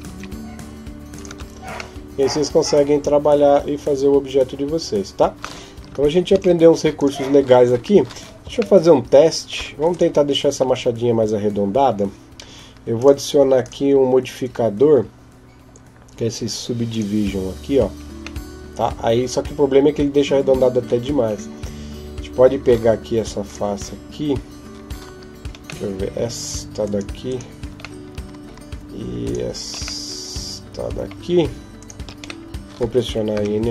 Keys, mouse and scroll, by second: 1.1 Tab, 1.8 middle click, 6.1 ctrl+s, 8.5 shift+middle click, 12.7 click, 13.4 click, 18.2 middle click, 20.9 Tab, 23.3 right click, 25.6 middle click, 26.6 right click, 27.0 right click, 27.8 middle click, 29.0 shift+right click, 29.8 middle click, 31.6 shift+right click, 32.2 middle click, 33.2 n.